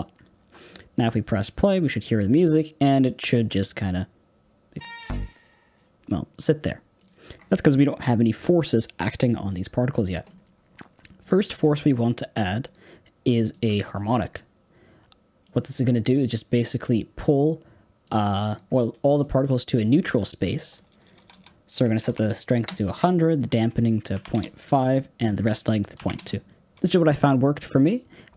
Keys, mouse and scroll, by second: 0.1-0.6 scroll up 4, 0.6-4.7 middle drag, 4.7 space, 5.8 space, 7.0-10.2 drag, 10.2 middle click, 10.4 scroll up 1, 10.5-11.0 scroll down 6, 11.0-13.5 middle drag, 13.5 shift+a, 13.9-22.5 middle drag, 22.5 KP_0, 24.3-28.3 drag.